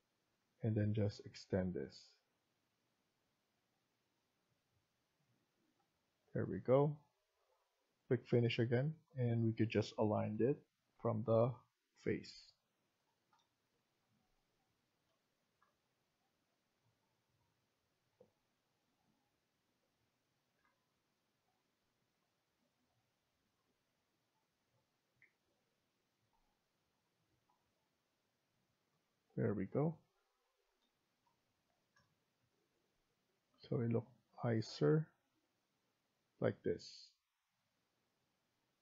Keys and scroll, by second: 8.8 Escape, 10.1 typing, 14.0 typing, 20.3 Escape, 20.5 Escape, 25.2 Escape, 29.0 Escape.